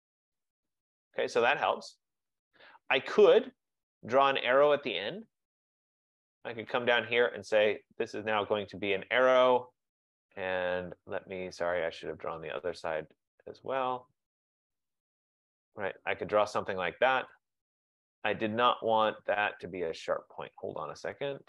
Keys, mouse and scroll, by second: 0.8 click, 3.9 click, 6.2 click, 7.7 click, 14.1 click, 15.4 click, 17.6 click, 21.0 click.